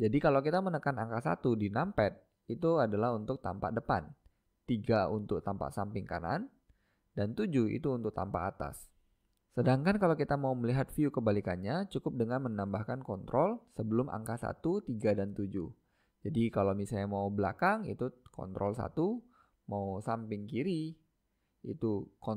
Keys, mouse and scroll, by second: 0.9-2.7 middle drag, 2.2 KP_1, 4.5 KP_3, 6.6 KP_7, 13.6 ctrl+KP_1, 15.2 ctrl+KP_3, 16.7 ctrl+KP_1, 21.1 ctrl+KP_3.